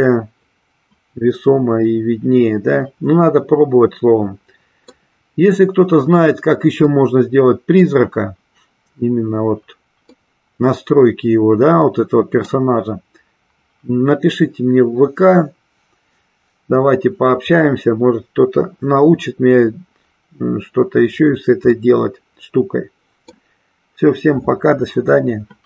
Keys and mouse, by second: 7.0 middle click, 10.0-12.5 middle drag, 21.8-23.5 middle drag.